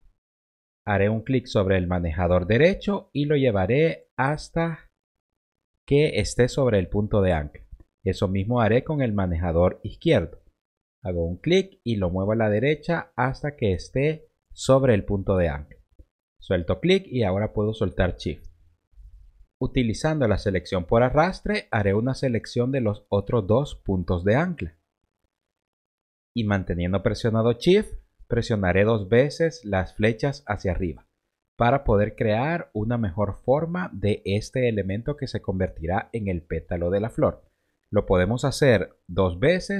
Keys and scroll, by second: 30.0 shift+Up.